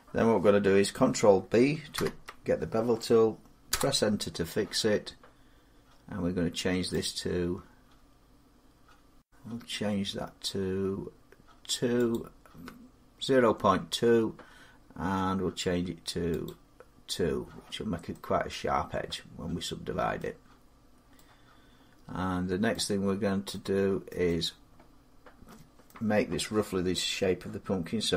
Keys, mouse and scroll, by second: 1.8 ctrl+b, 3.5 Return, 6.9 click, 9.0 click, 11.9 click, 15.5-19.9 drag, 19.9 middle click, 20.3 middle click, 20.5 middle click, 22.5 middle click, 23.9 middle click, 25.6 middle click, 27.9 a, 28.0-28.1 scroll.